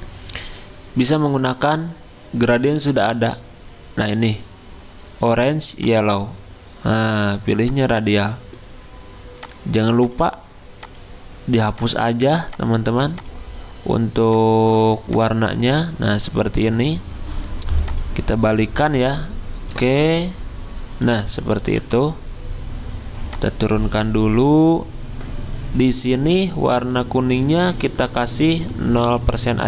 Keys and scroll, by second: 21.8 g.